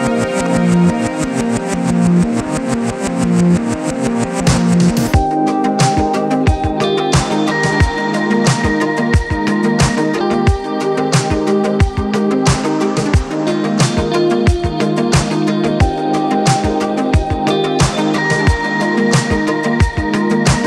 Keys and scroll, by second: 0.0-0.3 typing, 0.5 Return, 8.4-11.6 typing, 17.2 p.